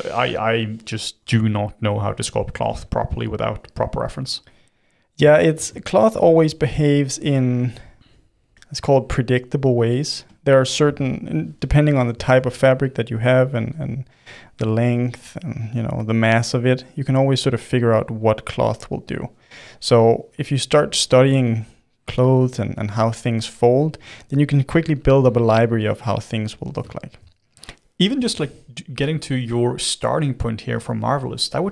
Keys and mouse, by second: 0.5 click, 1.2 f, 2.6 shift+f, 4.2 f, 4.9-6.6 middle drag, 6.6 f, 7.6 f, 8.4 f, 9.2-11.4 drag, 11.4 f, 12.2 shift+f, 13.7-18.3 drag, 18.3 middle click, 19.3-20.4 drag, 20.4 middle click, 21.1 click, 21.8-22.9 middle drag, 22.9 f, 23.8-26.1 drag, 26.1-28.1 middle drag, 28.1-30.1 drag, 30.1 middle click, 30.6-31.7 drag.